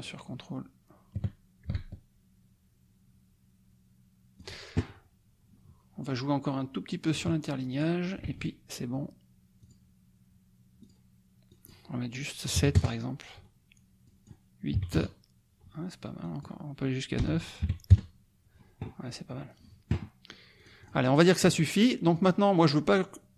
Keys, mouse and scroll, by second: 7.1 click, 7.7 click, 8.2 ctrl+a, 9.6 click, 10.8 click, 11.4 click, 12.5 KP_7, 12.7 KP_Enter, 14.0 click, 14.7 KP_8, 14.9 KP_Enter, 16.2 click, 17.4 BackSpace, 17.6 KP_9, 17.9 KP_Enter, 20.5 click, 21.1 click, 22.1 click.